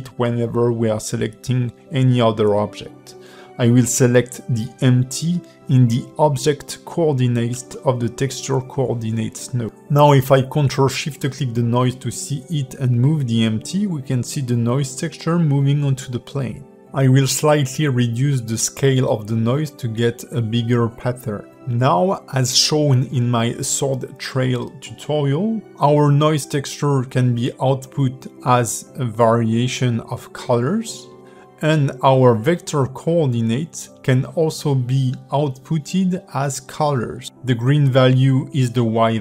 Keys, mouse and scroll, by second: 9.8 click, 10.1 ctrl+shift+click, 12.0 click, 12.6 click, 13.0 g, 16.2 click, 18.4 click, 18.8 click, 21.7 click, 23.6 click, 25.8 click, 26.9 click, 27.5 click, 29.1 ctrl+shift+click, 33.1 click, 34.3 click, 35.4 click, 36.3 click, 37.0 shift+middle click, 37.8 click, 38.5 ctrl+shift+click.